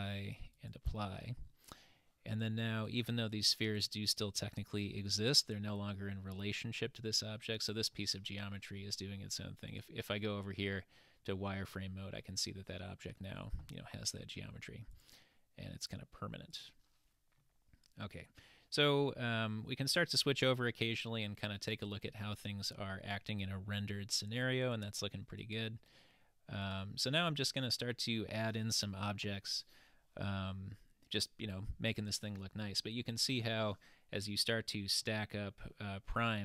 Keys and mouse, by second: 2.9 click, 3.3 click, 3.7 click, 5.2 click, 7.5-8.1 middle drag, 9.7 click, 10.7-11.9 middle drag, 15.0 click, 16.5 click, 17.4-18.2 middle drag, 19.1-19.8 middle drag, 20.8-21.4 middle drag, 24.7 click, 25.4 click, 26.6 click, 27.4-28.6 middle drag, 34.5-35.2 middle drag.